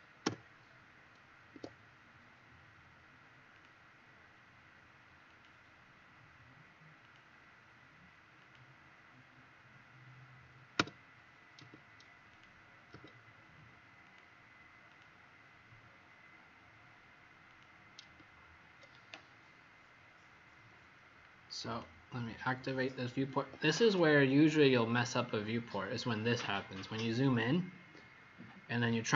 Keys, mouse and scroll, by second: 0.1 Return, 1.5 Escape, 5.2 click, 10.7 F3, 12.2 click, 12.9 F3, 14.1 click, 18.1 F3, 21.7 click, 23.3 Escape, 23.6 Escape, 23.8 Escape, 27.0-27.6 scroll up 3, 27.8 scroll up 1, 28.6 scroll up 1.